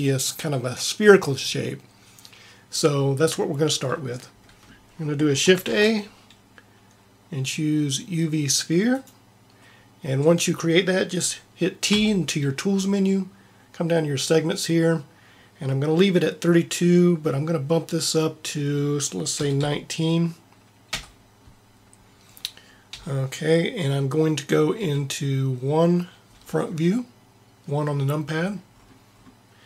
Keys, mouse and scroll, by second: 5.6 shift+a, 11.9 t, 18.0 click, 22.8 t, 24.7 KP_1, 28.1-29.6 middle drag.